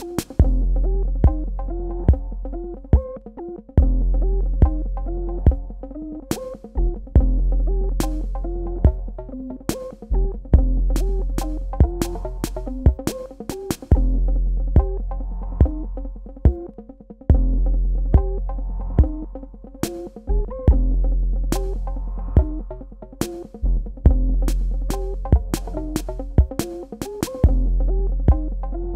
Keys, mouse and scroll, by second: 1.7 click, 3.8 KP_Add, 7.1 KP_Subtract, 9.3 space, 9.5 click, 9.7 Tab, 12.4 click, 23.2 click, 24.0 super+KP_Add.